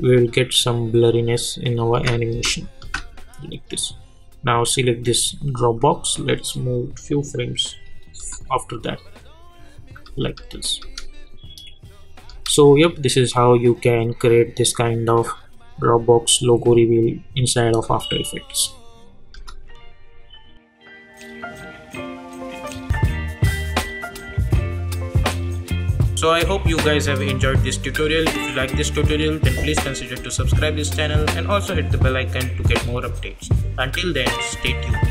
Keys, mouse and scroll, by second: 3.5 click, 19.5 space.